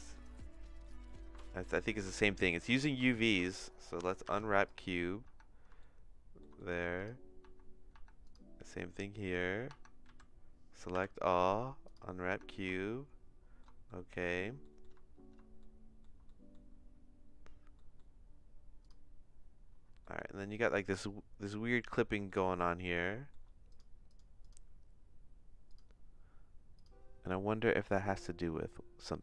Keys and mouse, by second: 0.2 middle click, 1.4 shift+middle click, 1.9 middle click, 2.2 shift+middle click, 2.6 shift+middle click, 3.1 Tab, 3.3 a, 4.2 u, 5.4 Tab, 5.8 shift+middle click, 6.5 middle click, 7.4 Tab, 7.9 Tab, 8.2 click, 8.7 middle click, 9.8 Tab, 10.0 a, 10.9 u, 12.5 Tab, 12.7 shift+middle click, 13.8 middle click, 14.6 middle click, 15.6 shift+middle click, 16.2 middle click, 17.8 middle click, 20.0 middle click, 22.2 shift+middle click, 22.9 shift+middle click, 23.7 click, 24.1 click, 24.4 click, 25.7 click, 28.1 click.